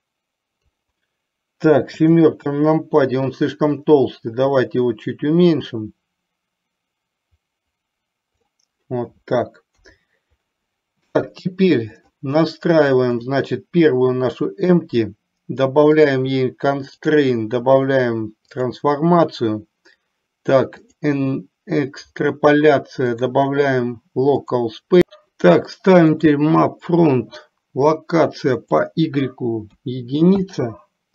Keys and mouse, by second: 2.1 KP_7, 3.9-8.7 drag, 9.8 KP_3, 12.1 click, 13.3 click, 17.1-18.8 drag, 20.9 click, 23.2-24.7 drag, 26.2 click, 28.7-30.6 drag.